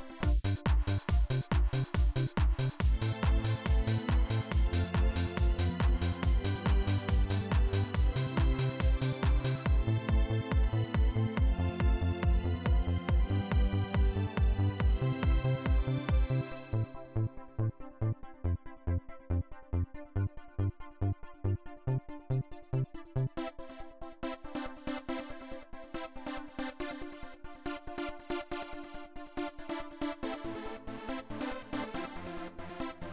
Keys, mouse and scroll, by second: 0.0 click, 0.6-1.9 drag, 10.3-12.0 drag, 13.4 click, 19.9 click, 24.4 click, 28.4 click, 29.5 click, 31.7 click, 32.9 click.